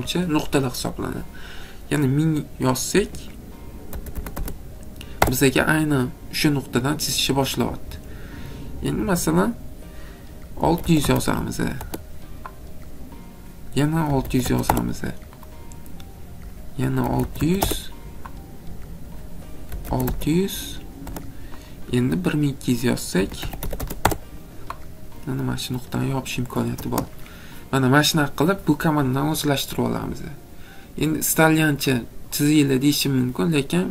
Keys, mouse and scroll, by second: 3.0-4.4 typing, 5.2 Return, 7.7 middle click, 7.8 middle click, 9.9-11.3 typing, 11.8 Return, 12.8 typing, 13.9-14.6 typing, 16.8-17.6 typing, 19.5-21.0 typing, 22.9-24.1 typing, 26.1 click, 27.2 middle click, 27.3 middle click, 27.7 middle click, 30.1 middle click.